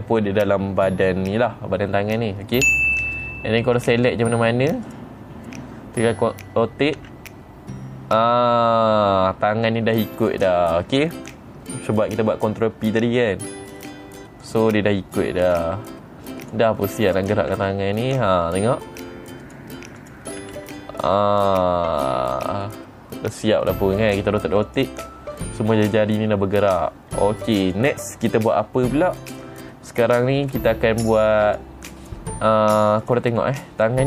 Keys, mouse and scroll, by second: 3.0 middle click, 4.3 click, 5.4 click, 7.5 r, 10.7 right click, 15.0 click, 16.0 r, 16.9 right click, 17.6 click, 18.0 r, 20.0 right click, 20.5 click, 20.9 r, 23.2 right click, 25.2 click, 26.3 r, 27.2 right click, 28.2 click, 31.0 scroll up 2, 32.0 click, 33.5 click, 33.9 middle click.